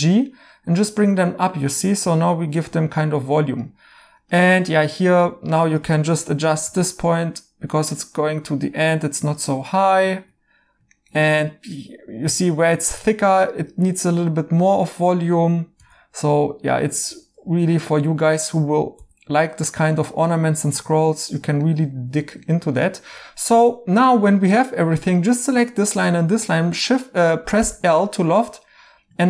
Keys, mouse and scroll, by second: 1.2 right click, 4.7 right click, 6.6 g, 10.1 right click, 14.0 2, 15.7 g, 17.1 ctrl+z, 19.8-20.5 typing, 22.5 2, 27.5 l.